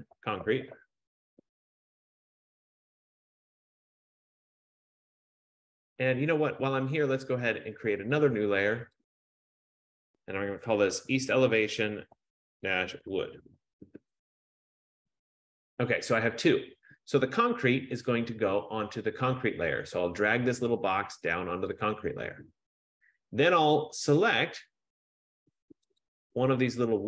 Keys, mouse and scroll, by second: 0.0-4.7 typing, 4.9 Return, 5.9-6.7 typing, 8.4 click, 9.2 click, 10.8-14.0 typing, 21.8 click, 24.2 click, 26.1 click.